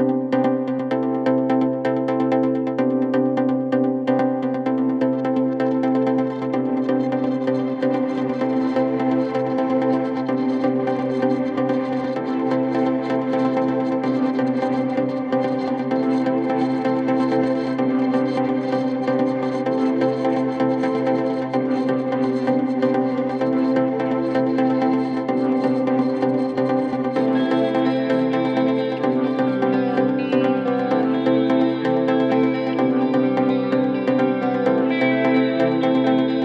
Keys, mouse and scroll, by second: 0.0 Tab, 0.2 scroll up 1, 1.2 alt+shift+click, 2.6 3, 3.6 alt+shift+click, 4.5 s, 9.5 Tab, 10.4 Tab, 11.4 2, 11.8 alt+click, 12.3 s, 14.0 Tab, 14.3-14.7 scroll down 1, 14.7 click, 15.4 Tab, 16.1 s, 18.1 alt+click, 18.5 s, 20.6 alt+click, 21.0 s, 24.4 alt+click, 24.9 s, 26.3 shift+middle click, 26.9-27.7 scroll up 3, 27.7 alt+click, 28.6 middle click, 28.8 scroll up 1, 29.0 scroll down 2, 29.4 click, 29.7 s, 32.2 scroll down 4, 32.5 click, 32.7 KP_1, 33.3 scroll up 2, 33.6 Tab, 34.1 click, 34.5 shift+scroll down 1, 34.5-35.6 shift+middle drag, 35.6 scroll up 1.